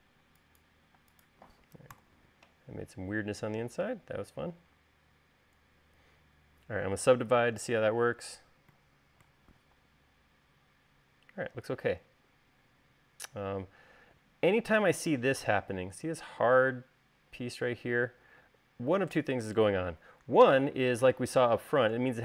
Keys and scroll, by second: 8.4 u.